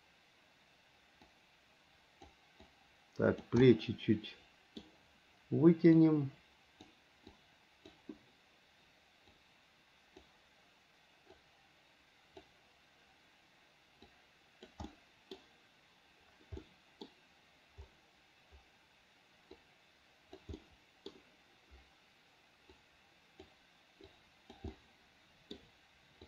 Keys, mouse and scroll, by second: 1.5-2.5 drag, 2.9 click, 3.9-5.0 middle drag, 6.2 click, 7.6 click, 9.6 click, 11.6-12.7 drag, 14.3 click, 15.1 middle click, 16.8 middle click, 19.8 click, 20.8 middle click, 23.0 click, 24.3 click, 24.9 middle click.